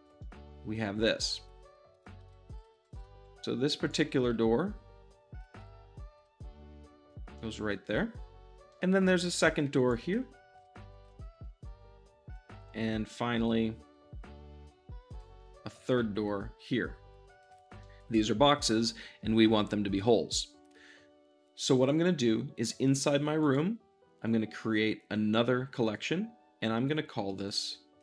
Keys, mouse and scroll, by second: 0.0 g, 0.0 click, 0.1-1.3 middle drag, 1.3 `, 2.2 g, 2.4 click, 2.5 `, 3.7-5.5 ctrl+drag, 4.2 g, 5.5 `, 5.9 middle drag, 6.2 g, 7.0 click, 7.3-9.8 middle drag, 9.8 click, 9.9 r, 10.5 ctrl+click, 10.6 g, 11.0 ctrl+click, 11.3 g, 12.3 click, 12.4 middle click, 12.6 shift+middle click, 13.3 shift+d, 15.0 click, 15.4-16.0 middle drag, 16.0 g, 17.3-17.7 drag, 17.7-23.4 shift+middle drag, 23.3-28.0 drag.